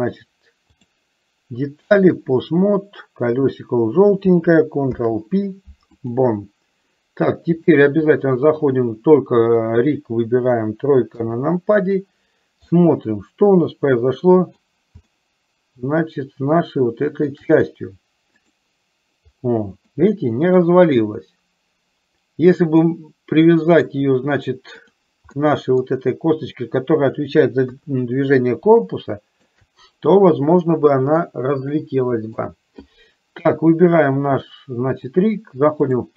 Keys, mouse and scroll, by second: 0.8-2.5 drag, 3.4 click, 4.9 ctrl+p, 7.6 click, 9.6 click, 11.2 KP_3, 12.9-14.8 middle drag, 15.2-17.4 shift+middle drag, 20.2 middle click, 23.0-24.1 middle drag, 25.0 click, 25.4 middle click, 27.8 KP_3, 29.0 shift+middle click, 31.5-32.7 middle drag, 35.1-36.1 drag.